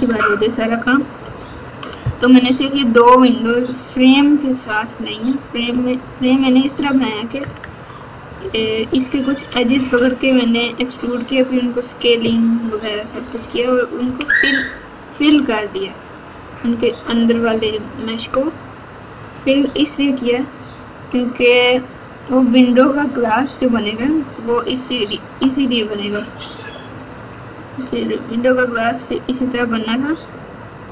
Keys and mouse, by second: 0.0 KP_Add, 1.2 ctrl+KP_6, 1.7 ctrl+KP_6, 5.7 KP_4, 5.9 KP_4, 6.1 KP_4, 7.4 KP_Add, 7.6 KP_Add, 9.0 Tab, 9.9 Tab, 12.6 KP_Subtract, 13.0 KP_Subtract, 13.3 KP_Subtract, 14.0 KP_6, 15.7 Tab, 27.1 middle click, 27.7 middle click, 28.3 middle click, 29.3 middle click.